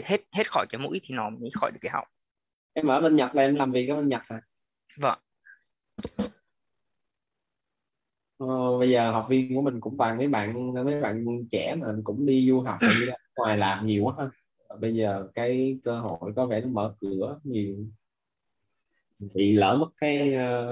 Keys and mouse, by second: 0.0 click.